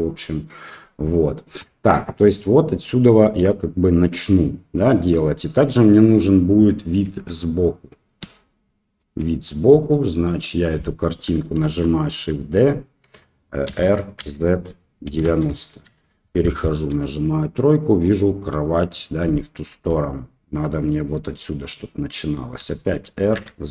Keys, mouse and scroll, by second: 7.0 KP_3, 8.2 KP_1, 9.0 KP_3, 9.7 KP_1, 10.3 click, 11.6 shift+d, 13.6 r, 16.6 KP_3, 22.5 r.